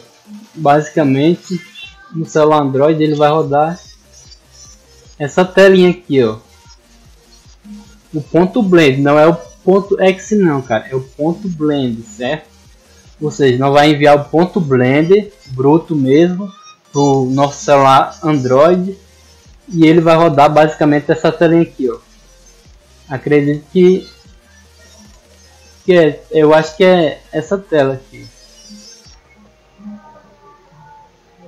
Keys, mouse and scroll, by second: 2.9 click, 4.1 middle click, 4.1-4.6 scroll up 2, 5.0 click, 18.1 click, 20.9 click, 22.7 click, 23.5 click, 24.8 click, 25.7 click, 27.1 click, 28.6 click, 29.0 click, 29.5 click, 30.5 click, 31.0 click, 31.3 click.